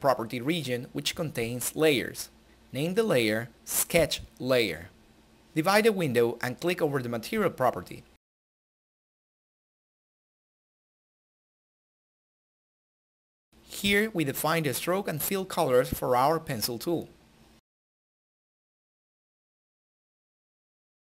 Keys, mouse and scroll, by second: 9.7-16.9 drag.